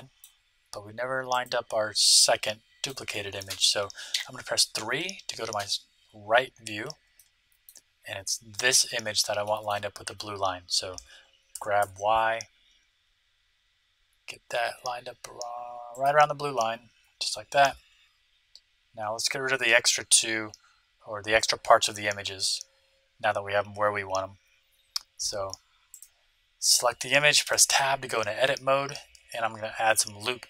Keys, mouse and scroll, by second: 1.3 click, 1.3-3.2 right drag, 1.9-3.1 drag, 3.1-4.7 middle drag, 4.1 KP_3, 4.8 middle click, 6.0 middle click, 7.1-8.9 middle drag, 9.4-11.2 middle drag, 11.5 g, 16.7-19.0 middle drag, 16.8-17.2 scroll down 1, 20.8-24.3 middle drag, 20.8-21.5 scroll down 1, 25.9-27.7 right drag, 27.4 Tab, 29.1-30.4 drag, 29.6 ctrl+r.